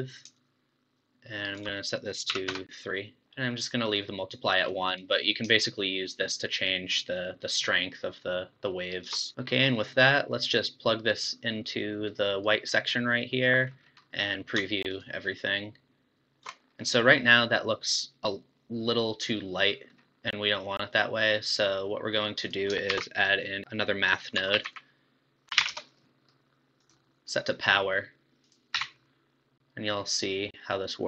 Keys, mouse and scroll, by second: 0.4-1.6 shift+drag, 1.8-3.9 drag, 4.7 click, 5.6-8.6 shift+drag, 9.3-11.1 middle drag, 11.1-13.0 drag, 13.0 middle click, 13.7 scroll up 1, 13.9 scroll down 3, 14.0-15.4 middle drag, 15.4 ctrl+shift+click, 16.8-19.8 middle drag, 20.6-22.4 middle drag, 22.4 click, 23.1 shift+a, 28.4 click, 30.3-30.8 scroll up 3, 30.8-31.0 drag.